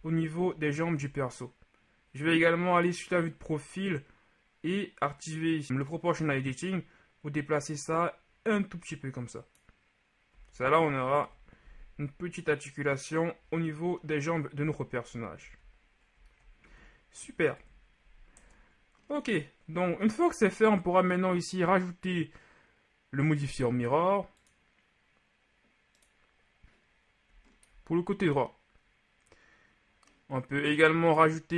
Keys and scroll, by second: 0.5 ctrl+z, 10.5 z, 11.3 KP_1, 14.7 KP_3, 15.5 z, 16.7 z, 17.6 KP_1, 18.4 Tab.